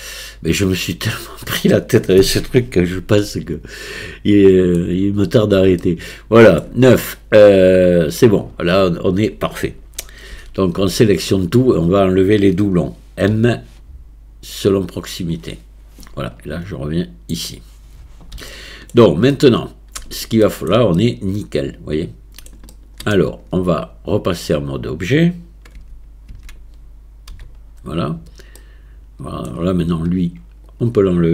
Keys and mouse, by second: 3.2-4.8 shift+drag, 5.8 shift+click, 10.3 a, 10.8 a, 13.3 m, 17.0 click, 18.5 shift+click, 19.3 middle click, 20.5 shift+middle click, 21.0-22.7 middle drag, 22.7 shift+middle click, 23.3 Tab, 25.8 Tab, 26.3 Tab, 27.3 a, 28.6-29.5 middle drag, 30.7 click.